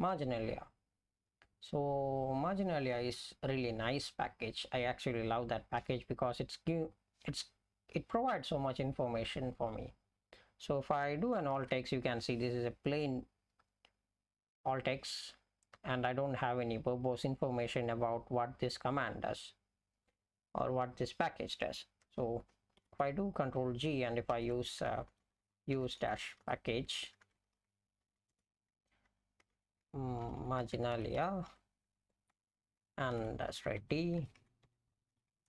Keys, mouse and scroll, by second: 4.1 ctrl+g, 9.5 F11, 11.6 alt+x, 22.8 ctrl+g, 24.3-35.4 typing, 32.3 Return.